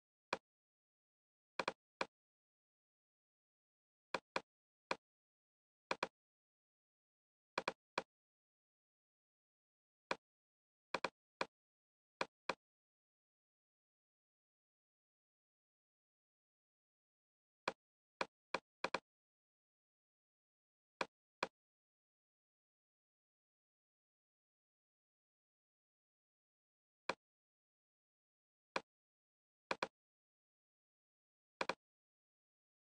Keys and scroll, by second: 24.4-25.2 typing.